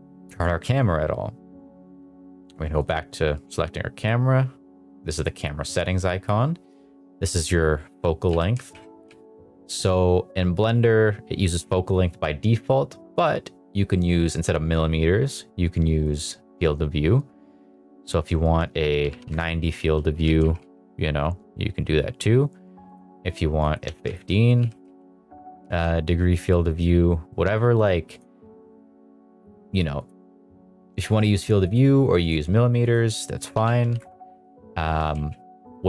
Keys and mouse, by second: 5.1 click, 6.7-8.0 drag, 8.2 g, 8.5 z, 9.0 z, 11.5 click, 12.5 click, 14.3-16.2 drag, 17.1-18.1 drag, 18.3-19.3 drag, 20.1 g, 20.4 z, 20.6 z, 22.8 click, 23.6 click, 24.5 g, 24.8 z, 25.6 z, 28.1 click, 30.0-31.1 drag, 31.7 click, 32.8-34.0 drag, 34.8 g, 35.1 z, 35.6 click.